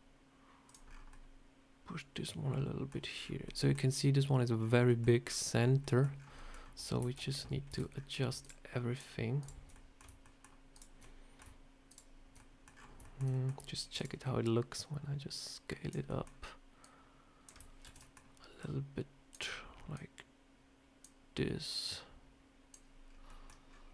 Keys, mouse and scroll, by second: 0.8-1.2 scroll down 4, 1.0 middle click, 6.0 scroll down 3, 6.3 middle click.